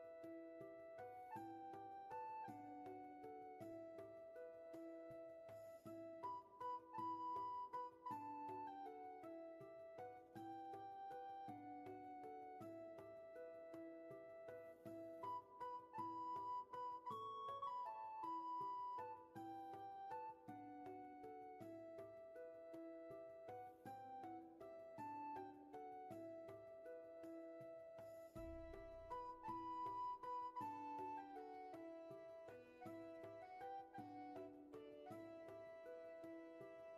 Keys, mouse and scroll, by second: 6.1 ctrl+z, 17.8 ctrl+z, 20.3 ctrl+z, 23.9 ctrl+z, 26.4 ctrl+shift+z, 33.9 ctrl+z.